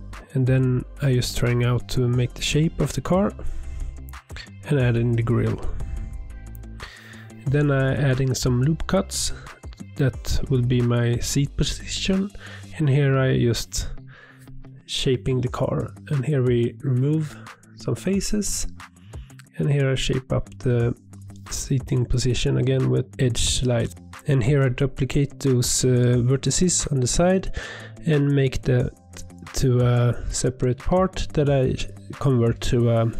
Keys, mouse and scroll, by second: 0.8 click, 1.3 shift+click, 1.6-3.7 typing, 2.0 click, 2.1 shift+click, 2.7 click, 3.9 ctrl+r, 4.5 click, 4.8 shift+click, 4.9 f, 5.2 a, 5.4 m, 5.7 Tab, 5.8 scroll down 3, 5.9-6.4 middle drag, 6.4 scroll down 3, 6.5 middle click, 6.9 Tab, 7.2 ctrl+r, 8.2 ctrl+r, 8.8 shift+middle click, 9.0 click, 9.3 g, 10.0 ctrl+r, 11.0 click, 11.2 click, 11.6 s, 13.1 Tab, 13.2-13.6 middle drag, 13.6 scroll down 2, 13.6 shift+middle drag, 13.9 scroll up 1, 14.0 click, 14.1 Tab, 14.3 middle click, 14.6 3, 14.8 click, 15.0 shift+click, 15.1 shift+click, 15.2 middle click, 15.6 x, 16.5 1, 16.7 ctrl+r, 17.3 shift+middle click, 17.4 scroll up 2, 17.8 click, 18.2 g, 18.9 g, 19.3 click, 19.5 g, 20.0 click, 20.2 g, 20.8 middle click, 21.5 click, 21.6 g, 21.9 shift+middle click, 22.3 click, 22.6 g, 23.1 click, 23.4 g, 23.9 scroll down 1, 24.0 Tab, 24.1 Tab, 24.4 alt+click, 24.7 shift+d, 25.0 p, 26.1 Tab, 26.3 Tab, 26.5 alt+click, 26.8 Tab, 27.1 click, 27.3 click, 27.3 click, 28.5 click, 28.7 click, 28.7 click, 29.2 d, 30.4-31.3 right drag, 31.6 drag, 31.7 scroll down 3, 32.0 click, 33.0 ctrl+a.